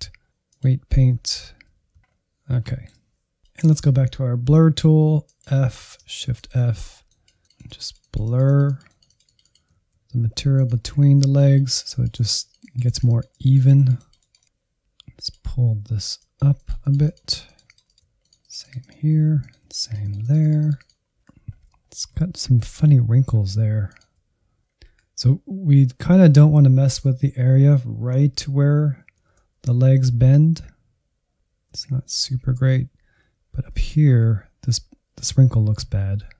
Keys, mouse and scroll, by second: 1.1 middle click, 1.2 alt+z, 1.8 ctrl+click, 1.8 alt+z, 2.0 scroll up 1, 2.3 shift+middle click, 2.7 f, 3.3 click, 4.0 f, 4.8 shift+f, 5.6-6.9 drag, 6.9 shift+z, 7.2-9.6 drag, 9.6 alt+z, 10.8 ctrl+click, 11.0 alt+z, 11.3-12.6 drag, 13.0-17.4 drag, 17.5-19.5 drag, 19.5 Insert, 20.2 middle click, 21.1 Insert, 21.3 scroll up 2, 21.5 middle click, 22.4 ctrl+click, 23.4 f, 23.8 Insert, 24.0 middle click, 24.6 scroll up 1, 24.7 Insert, 25.4 middle click, 26.0 alt+z, 26.9 Down, 27.6-29.3 drag, 30.8 Right, 31.3 Left, 31.7 Left, 32.0 Left, 32.2 Right, 32.4 Right, 32.6 Right, 33.2 scroll up 1, 33.7 middle click, 34.0 Insert.